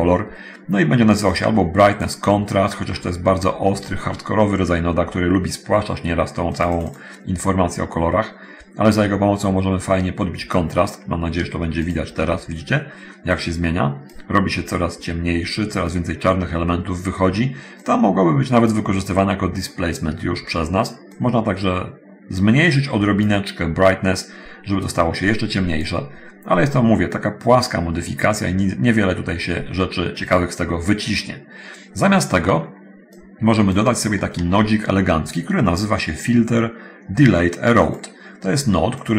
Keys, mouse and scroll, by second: 1.4 click, 2.2 click, 2.8-4.0 scroll up 1, 4.0-5.4 middle drag, 6.8 click, 10.0-10.9 drag, 11.8 ctrl+shift+click, 13.3-14.5 drag, 17.9-19.0 drag, 21.4-23.6 drag, 25.0-26.2 drag, 29.2-30.7 drag, 33.4 click, 34.6 shift+a, 38.0 scroll up 1, 39.0-39.1 scroll up 1.